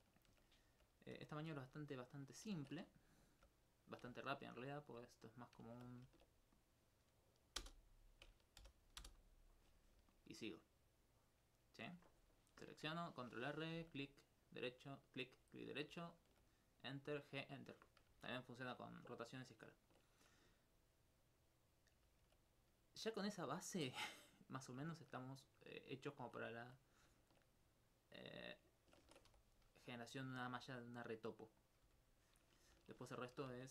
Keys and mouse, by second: 0.7 alt+right click, 1.5 g, 2.3 shift+click, 2.6 ctrl+Tab, 2.8 ctrl+1, 3.1 right click, 3.5 g, 3.9 click, 4.3 alt+click, 4.7 right click, 5.5 click, 5.8 alt+click, 7.0 right click, 8.6 g, 9.0 Return, 9.5 right click, 10.1 alt+click, 11.1 alt+click, 22.4 right click, 22.8 shift+right click, 23.4 alt+click, 29.6 right click, 30.5 right click, 31.6 click, 31.9 r, 33.0 click.